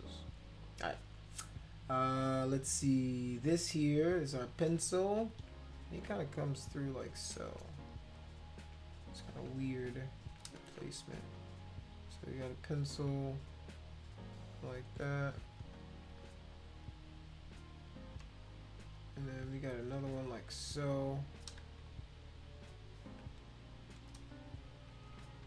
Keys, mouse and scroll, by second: 4.3 click, 6.0 click, 7.4 click, 8.1 shift+click, 9.3 click, 10.6 ctrl+z, 11.0 click, 11.3 shift+click, 12.2 shift+click, 14.2 click, 14.8 click, 15.2 click, 15.6 click, 16.1 click, 16.8 click, 19.7 click, 20.3 shift+click, 21.1 click, 21.6 ctrl+z, 25.3 ctrl+z.